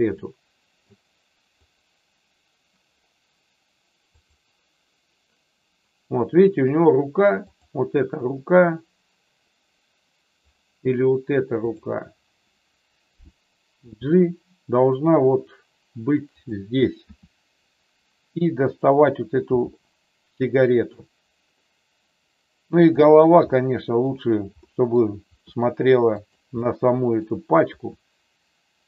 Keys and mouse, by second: 0.1 middle click, 1.6 click, 4.1 click, 7.3 click, 11.6 click, 14.0 g, 17.0 r, 19.6 g, 20.9 click, 23.5 middle click, 24.6 middle click, 25.4 r, 26.1 click, 26.6 middle click.